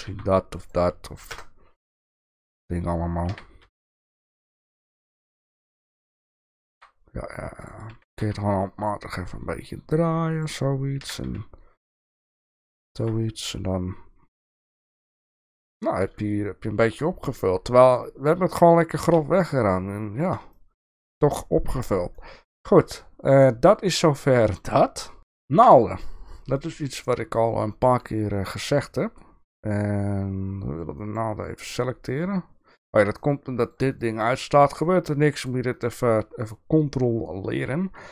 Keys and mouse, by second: 0.0 s, 1.2 KP_0, 2.0 shift+middle click, 3.3 g, 5.6 shift+middle drag, 6.7 g, 7.9 r, 11.0 g, 12.6 shift+middle click, 14.6 click, 15.2 click, 20.6 shift+middle drag, 22.1-22.4 shift+middle drag, 25.3-25.7 shift+middle drag, 26.4 click, 31.0 click, 33.1 click, 33.6 click, 33.9 click, 34.2 click, 34.5 click, 35.4 click, 35.7 click.